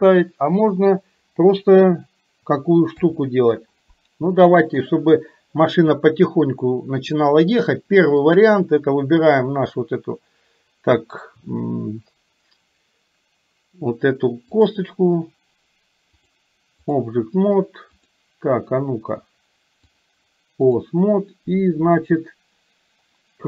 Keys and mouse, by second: 2.9 KP_3, 4.4 middle click, 8.3 click, 14.5 click, 16.3 click, 18.0 click, 20.0 click.